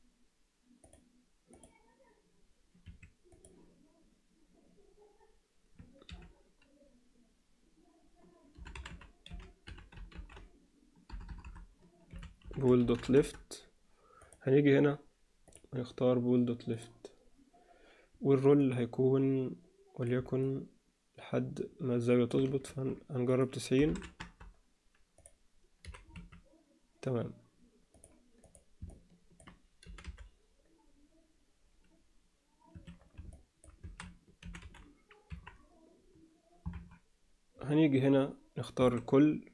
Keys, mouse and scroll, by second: 1.5-2.9 drag, 3.3 click, 6.1 F2, 11.2 BackSpace, 15.5-16.8 drag, 18.7-20.1 drag, 20.4-22.3 middle drag, 23.3-24.4 drag, 25.8 g, 28.9-29.4 alt+middle drag, 29.8 g, 33.3-33.7 alt+middle drag, 33.8 a, 34.4 alt+r, 34.6 alt+g, 35.3 KP_1, 36.7 KP_3, 38.8 a.